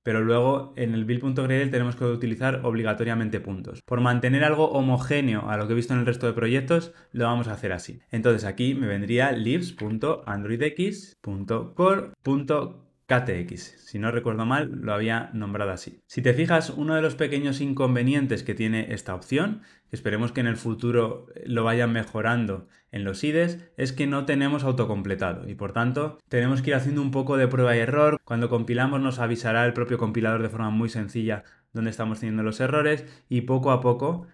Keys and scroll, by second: 11.6 Tab, 16.0 alt+super+[.